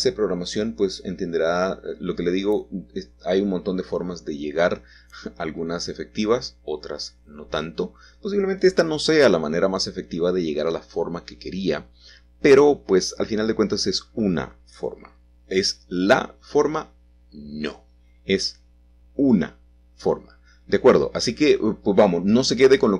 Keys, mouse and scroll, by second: 3.1-4.2 shift+drag, 5.2-6.7 shift+drag, 8.2-10.2 scroll down 1, 9.1-11.2 middle drag, 12.6 c, 13.3 middle click, 13.7 Escape, 14.7 p, 15.9 click, 17.4-18.9 middle drag, 19.1 middle click, 19.3 click, 19.8-22.9 middle drag.